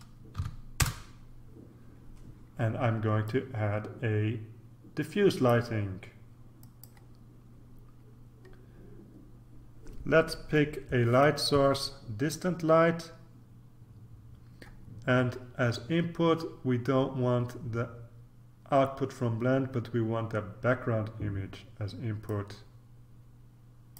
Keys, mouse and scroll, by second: 0.0-0.3 typing, 0.8 Return, 3.2-6.1 drag, 6.6 click, 7.9-9.0 scroll down 1, 11.2 click, 22.2-23.9 drag.